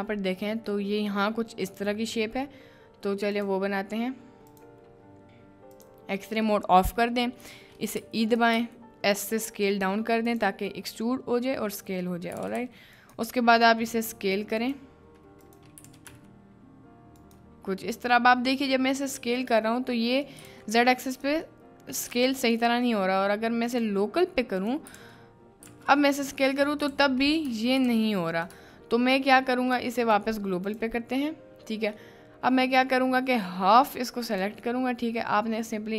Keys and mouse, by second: 20.3 right click, 22.6 right click, 27.5 b, 28.5 b, 29.7 b.